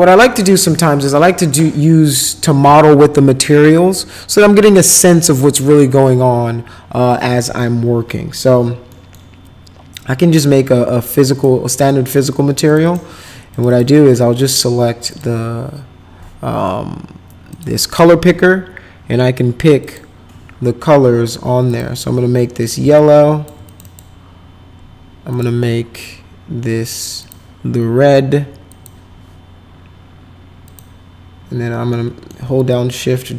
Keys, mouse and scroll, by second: 8.9 middle click, 10.9 click, 11.8 middle click, 12.6 click, 12.8 click, 13.5 click, 13.7 click, 15.1 click, 17.5 click, 19.8 click, 21.6 click, 22.3 middle click, 22.9 shift+click, 23.6 click, 23.8 click, 25.3 click, 27.2 click, 28.7 click, 30.6 click, 31.9 middle click, 32.7-33.3 shift+drag.